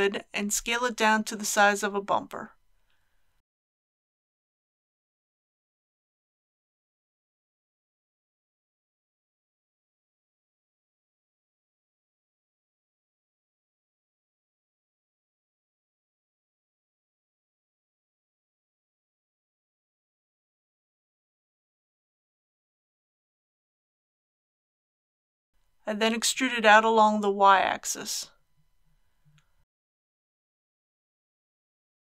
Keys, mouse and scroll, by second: 3.5 shift+d, 5.1 s, 5.4 z, 11.6 click, 19.3 g, 20.8 z, 23.0 click, 23.6-25.5 middle drag, 25.5 click, 26.0 e, 26.3 y, 31.6 shift+click.